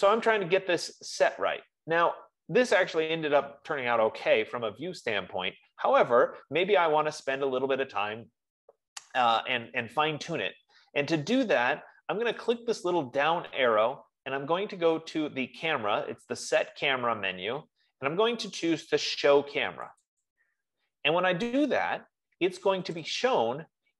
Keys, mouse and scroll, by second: 13.0-17.7 drag, 20.5 click, 23.4 click.